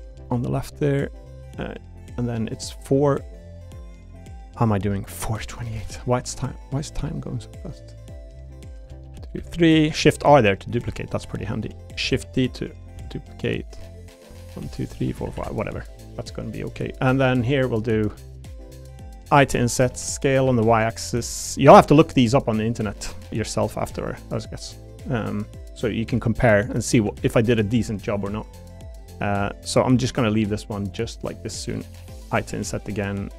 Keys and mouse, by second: 0.2 Tab, 3.4 click, 4.7 click, 5.7 shift+d, 6.4 u, 6.9 y, 8.6 click, 9.0 shift+r, 9.4 shift+r, 10.8-13.0 typing, 14.0 click, 14.6 shift+r, 15.0 shift+r, 15.2 shift+r, 15.4 shift+r, 16.3 click, 18.6 click, 19.3-21.7 typing, 19.7 click, 22.9 click, 23.6 s, 23.9 y, 24.6 click, 25.0 click, 26.1 e, 27.0 a, 27.2 g, 29.9 i, 32.3 i.